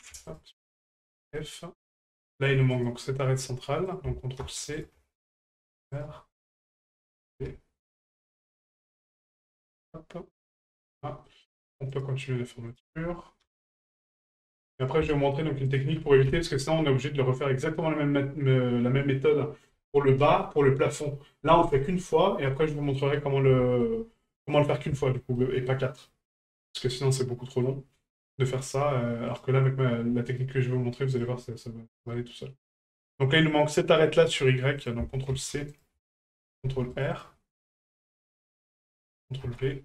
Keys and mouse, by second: 0.2 shift+right click, 1.3 middle drag, 2.7 right click, 4.0 ctrl+click, 6.8-9.5 ctrl+drag, 10.7 right click, 11.2 middle click, 11.9 shift+right click, 12.7 shift+right click, 14.1 middle click, 14.7 right click, 15.7 shift+right click, 16.6-17.8 middle drag, 21.1-23.0 middle drag, 23.6 shift+middle drag, 24.5 middle drag, 25.0 shift+middle drag, 25.3-25.7 middle drag, 26.1 middle click, 26.4 shift+middle drag, 27.2-27.6 middle drag, 28.0 middle drag, 29.3 right click, 30.4 middle click, 31.1 right click, 31.9 middle click, 34.8 click, 38.1 click, 38.8-39.8 drag.